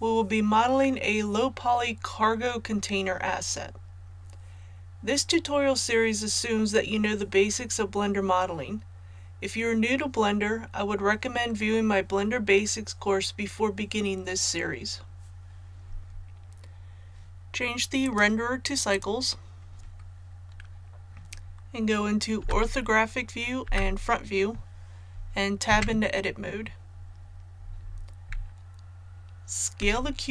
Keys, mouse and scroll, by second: 22.3 KP_5, 23.5 KP_5, 23.6 KP_1, 25.6 Tab, 28.5 right click, 29.7 s.